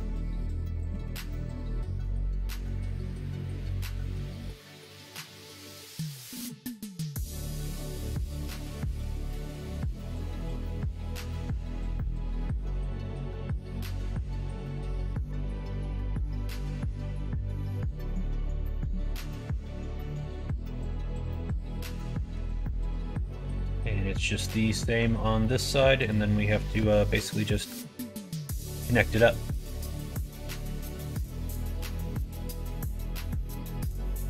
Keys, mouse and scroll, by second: 0.1 click, 0.9 ctrl+z, 1.2 middle click, 2.9 middle click, 4.2-5.4 middle drag, 5.4 click, 8.0 shift+d, 9.9 click, 10.7 shift+click, 11.9 shift+n, 12.4 middle click, 13.5 click, 14.2 middle click, 14.7 alt+z, 15.1 middle click, 16.2 s, 18.4 middle click, 19.1 2, 19.9 middle click, 20.3 middle click, 21.1 click, 22.3 g, 24.6 middle click, 24.9 Tab, 25.3 middle click, 26.0 click, 26.9 Tab, 27.2 middle click, 30.2 Tab, 30.8 middle click, 31.5 click, 31.9 middle click, 32.6-33.8 middle drag, 34.1 middle click.